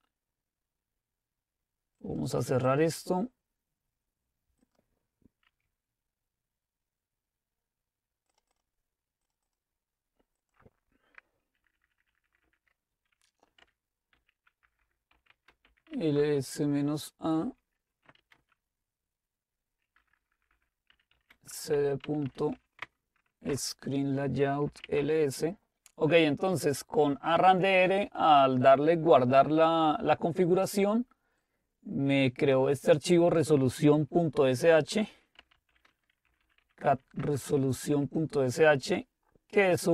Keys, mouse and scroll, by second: 2.6 click, 5.0 click, 8.7-11.3 drag, 11.6 ctrl++, 11.8 ctrl++, 12.0 ctrl++, 12.1 ctrl++, 12.3 ctrl++, 13.6-16.4 typing, 18.3 typing, 20.0-25.3 typing, 26.5-27.2 typing, 31.4-34.8 drag, 35.2-37.9 typing.